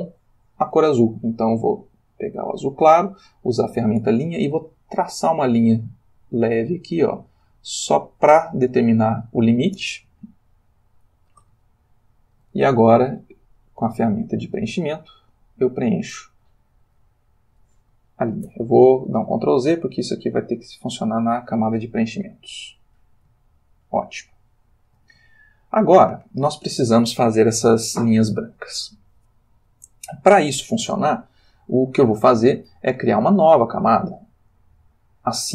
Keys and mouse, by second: 1.7 click, 2.5 click, 5.3-8.5 drag, 8.5 middle click, 10.3-11.5 ctrl+middle drag, 11.7 ctrl+shift+middle click, 14.1 click, 15.2 click, 18.4 ctrl+z, 20.3 click, 22.1 click, 24.1-25.1 shift+middle drag, 25.3-26.5 ctrl+shift+middle drag, 34.3 click.